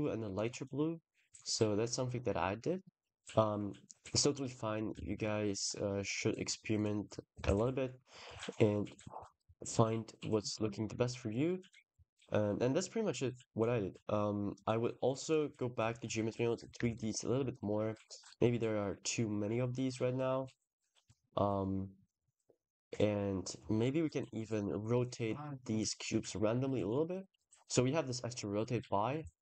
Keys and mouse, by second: 0.2 click, 4.8 ctrl+s, 6.6 click, 7.3 ctrl+s, 13.4-15.3 drag, 16.7 ctrl+s, 18.1-20.9 drag, 23.0 click, 24.4 click.